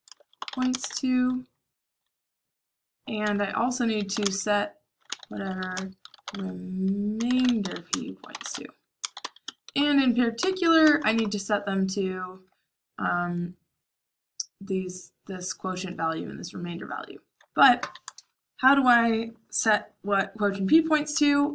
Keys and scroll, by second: 0.0-2.3 typing, 3.2 Return, 3.7-11.7 typing.